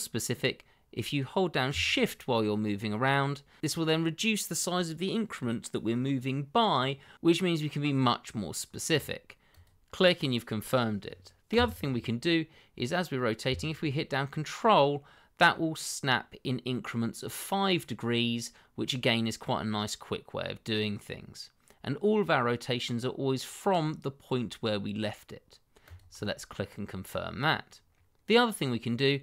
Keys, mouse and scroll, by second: 9.5 click, 11.5 r, 25.8 ctrl+click, 27.1 click, 28.2 middle click.